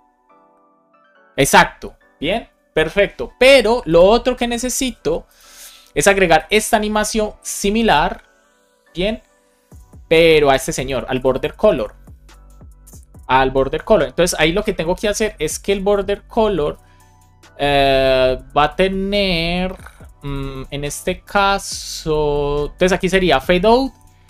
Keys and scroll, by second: 6.4 shift+super+Left, 6.8 super+c, 16.2 Return, 16.6 super+v.